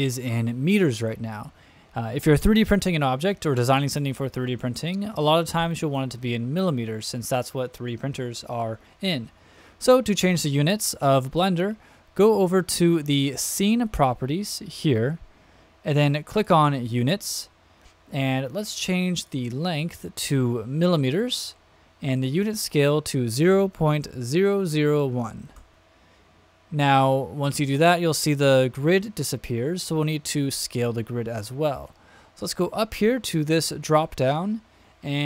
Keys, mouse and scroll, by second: 13.8 click, 16.3 click, 19.1-20.9 drag, 22.1-26.5 drag, 33.8-35.2 drag.